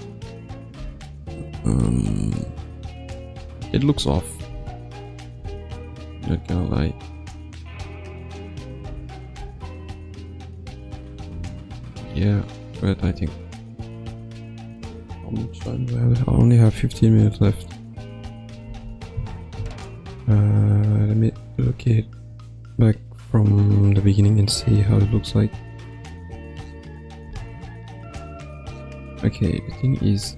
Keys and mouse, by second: 0.8 space, 2.3-2.8 drag, 3.3 g, 4.1 click, 4.4 space, 5.3 space, 5.8-8.3 drag, 8.8 space, 9.3 space, 10.1 click, 11.3 g, 13.3-14.0 drag, 14.2 g, 16.7 click, 17.4 g, 18.7 ctrl+s, 19.8 ctrl+alt+middle click, 21.0 click, 21.3 space, 27.3 space, 28.5-30.0 drag.